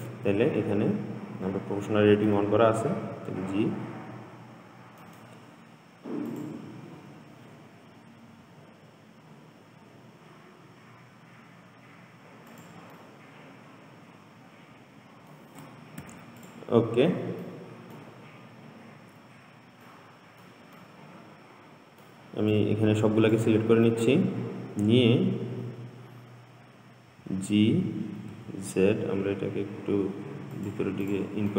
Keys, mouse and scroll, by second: 0.0 click, 2.5 g, 6.5 click, 8.5 g, 13.2-16.2 middle drag, 16.3 Tab, 16.6 click, 17.1 scroll down 2, 17.7-18.7 middle drag, 18.7-20.1 scroll up 1, 20.1-22.8 middle drag, 22.8 drag, 27.4 g, 31.3 click.